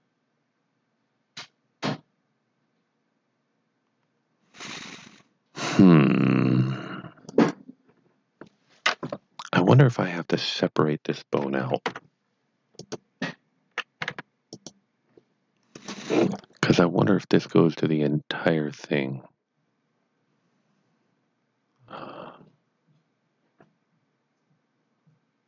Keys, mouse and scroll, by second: 7.2 click, 10.1 click, 11.8 p, 12.8 click, 14.0 Tab, 14.5 click, 15.7 click.